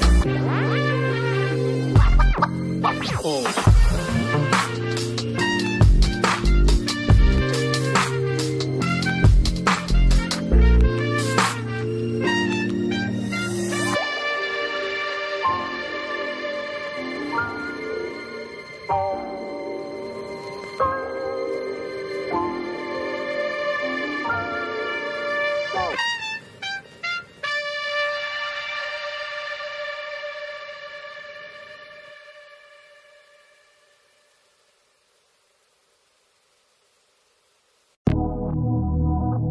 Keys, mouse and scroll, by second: 1.4 alt+click, 4.3 double click, 6.5 double click, 12.7 double click, 15.7 double click, 23.3 alt+click, 33.5 double click, 35.0 scroll down 1, 35.6 double click, 38.1 alt+click.